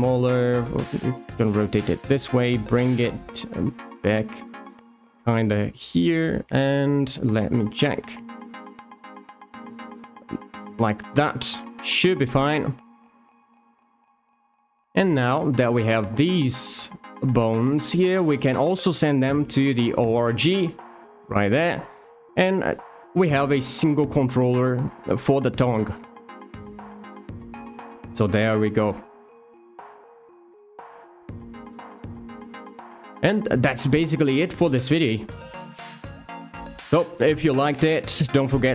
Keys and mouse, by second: 0.3 r, 1.3 click, 1.6 g, 2.7 click, 3.0 s, 3.5 click, 3.8 g, 4.4 click, 4.8 r, 5.4 click, 6.9 middle click, 8.6 s, 9.0 x, 9.6 click, 10.7 click, 16.0 shift+click, 18.7 click, 20.2 click, 21.2 click, 23.4 r, 25.7 shift+middle drag, 26.1 middle drag, 26.9 r, 27.1 r, 28.9 click, 29.0 g, 31.1 middle click, 31.9 g, 33.4 click, 33.8 middle click, 34.8 r, 35.0 r.